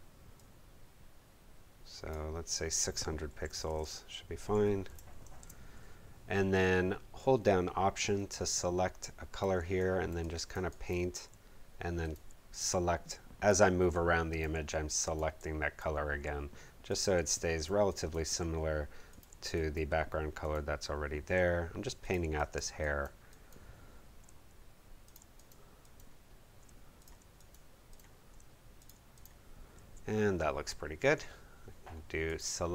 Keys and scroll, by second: 3.0-4.9 typing, 5.5 Home.